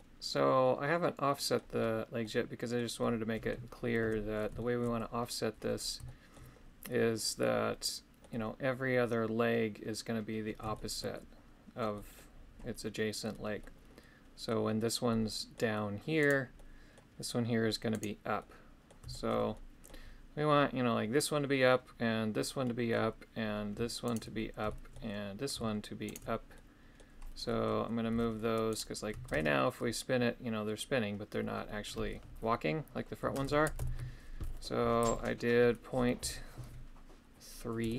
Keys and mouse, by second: 2.2 middle click, 2.9 middle click, 4.6 shift+middle click, 6.0 shift+middle click, 7.4 middle click, 10.7 shift+middle click, 11.9 middle click, 13.6 middle click, 15.1 middle click, 16.2 right click, 16.5 middle click, 17.9 right click, 18.4 middle click, 19.1 shift+middle click, 19.5 middle click, 22.6 middle click, 24.1 shift+right click, 24.7 shift+middle click, 26.1 shift+right click, 26.5 middle click, 27.4 middle click, 28.7-37.9 right drag.